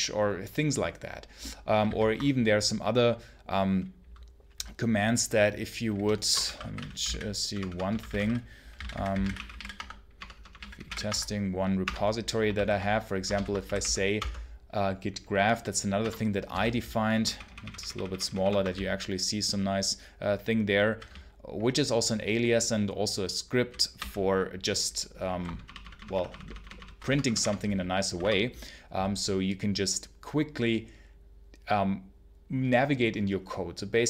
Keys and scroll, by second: 1.7 ctrl+c, 6.1-11.2 typing, 11.7 Return, 12.4 ctrl+g, 13.2 ctrl+l, 13.5 g, 14.0 space, 15.9 Return, 16.4 j, 17.1 ctrl+-, 17.4 ctrl+-, 18.6 j, 19.3 j, 20.1 j, 21.0 k, 23.8 q, 25.5 ctrl+shift+=, 26.9 BackSpace, 28.0 1, 28.0 Return.